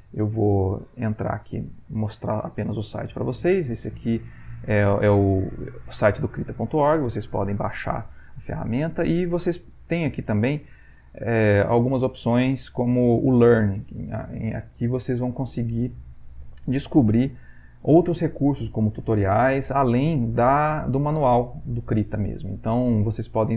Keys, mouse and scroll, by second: 20.2 click, 23.0 click.